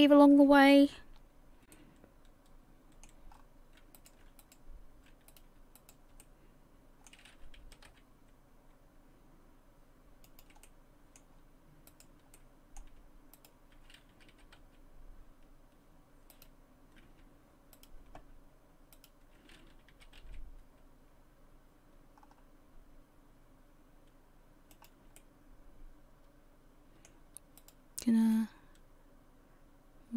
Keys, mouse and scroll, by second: 1.2-1.7 scroll up 1, 1.7 middle click, 3.3-4.0 scroll up 3, 4.0 right click, 4.4 shift+right click, 5.3 right click, 5.8 shift+right click, 6.2 middle click, 7.6 s, 10.6 middle click, 11.9 right click, 12.3 middle click, 13.4 shift+right click, 14.3 s, 17.8 shift+right click, 18.9 shift+right click, 19.9 s, 25.2 middle click, 27.6 right click, 28.3 click.